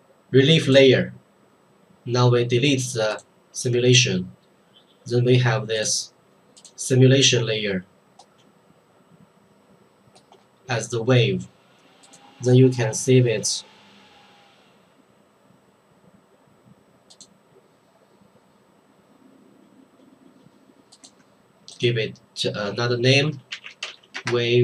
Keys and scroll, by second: 22.7 Escape, 23.5 w, 23.7 a, 23.8 v, 23.9 e.